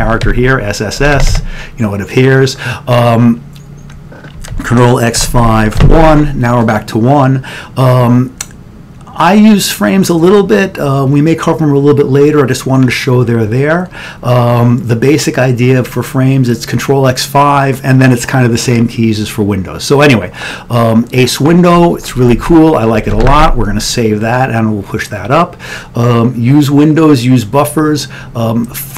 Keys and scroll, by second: 0.0-1.3 typing, 4.6 ctrl+x, 5.2 5, 5.8 1, 22.7 Down, 23.1 ctrl+x, 23.3 ctrl+s.